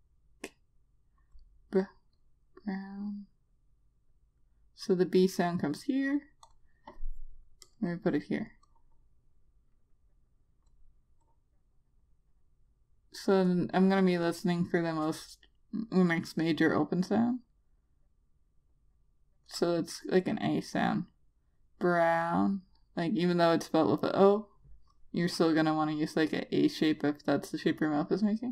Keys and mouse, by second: 17.7 click.